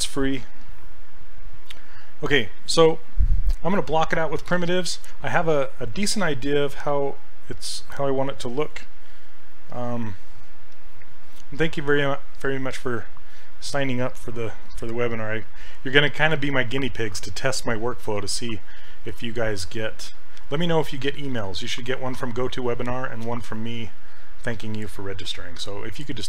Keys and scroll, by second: 0.4 s, 10.3 s.